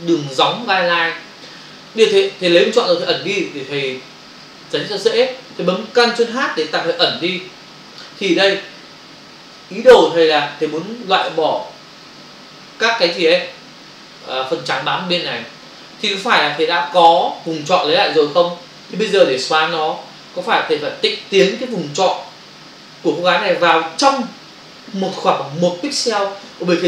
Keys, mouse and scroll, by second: 9.4 space, 9.9 ctrl+click, 10.6 click.